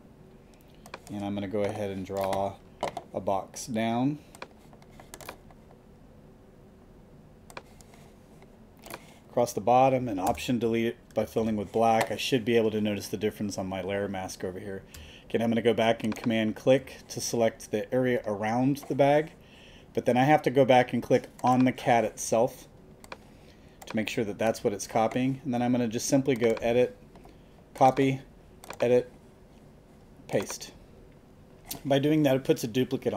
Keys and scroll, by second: 10.2 alt+BackSpace, 11.2 alt+super+BackSpace, 11.7 super+d.